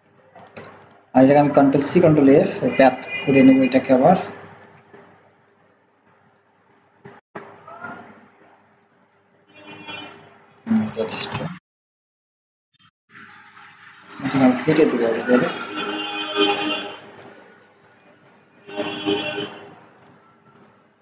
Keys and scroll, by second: 1.4 ctrl+c, 2.0 ctrl+f.